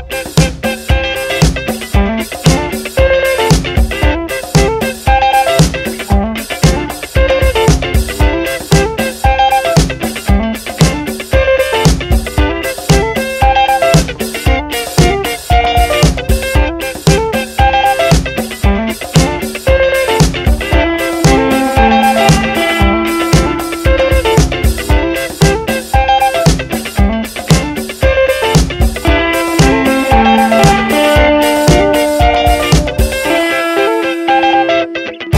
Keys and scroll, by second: 0.1 Up, 1.0 Down, 2.2 ctrl+t, 11.2 Return, 11.6 Down, 12.8 Left, 17.4 ctrl+=, 18.4 ctrl+-, 20.5 ctrl+=, 22.8 F7, 25.5 ctrl+shift+n, 26.2 Return, 27.8 b.